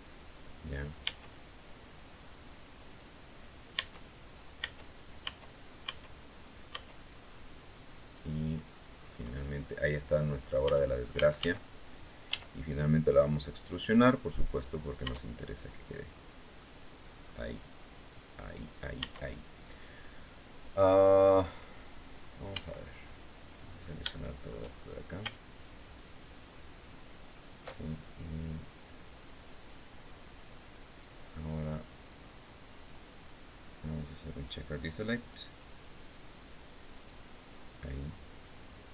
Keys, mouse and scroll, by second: 0.8 Tab, 1.7-2.3 scroll up 2, 2.7 click, 3.5 Tab, 4.3 Tab, 6.4 Tab, 6.7 scroll down 2, 7.0 click, 7.9 scroll up 2, 8.7-9.0 scroll up 2, 10.4 Tab, 10.9 a, 12.0 e, 14.3 click, 14.7 Tab, 15.1-16.5 middle drag, 16.7-17.1 scroll up 2, 17.2 scroll up 2, 17.9 scroll down 2, 18.7 Tab, 21.4-21.8 scroll up 2, 22.2 a, 23.5 scroll up 2, 23.8 shift+click, 23.9 shift+middle click, 25.4 alt+shift+right click, 32.9-33.5 scroll down 4, 34.9 click, 36.8 click.